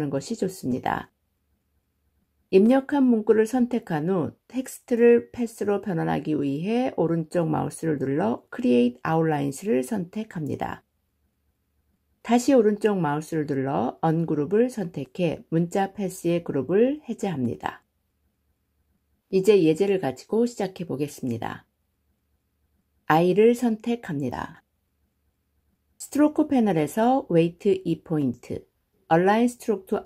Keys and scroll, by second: 7.4 ctrl+shift+o, 14.3 ctrl+shift+g.